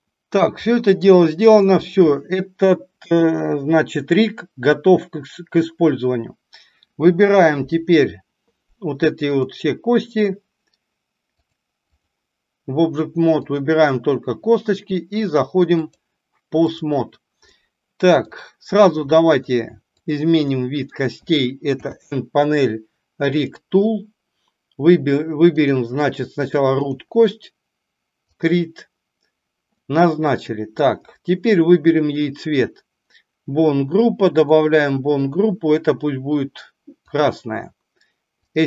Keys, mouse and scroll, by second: 0.6-1.5 middle drag, 9.4 click, 11.5 click, 13.4 click, 15.6-16.7 drag, 17.5-18.2 middle drag, 19.0 middle click, 19.9 click, 20.5-20.9 middle drag, 21.7 n, 23.2 click, 25.5-26.9 drag, 29.7-30.7 middle drag, 34.4 click, 35.2-37.2 drag, 38.5 click.